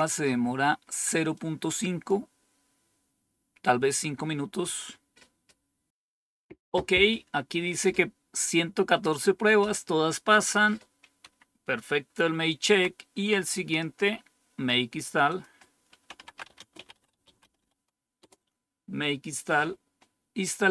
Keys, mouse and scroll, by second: 1.3 click, 10.3 click, 12.6 End, 13.9-14.7 scroll down 1, 14.7-15.2 scroll down 1, 15.2 click, 15.8-18.0 typing, 18.1 Return.